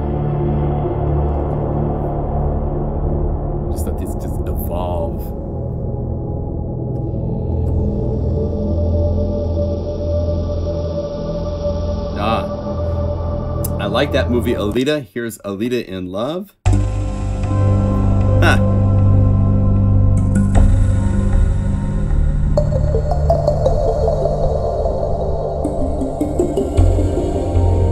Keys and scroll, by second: 20.1 F3, 26.3 F4, 26.7 F1, 26.8 F2.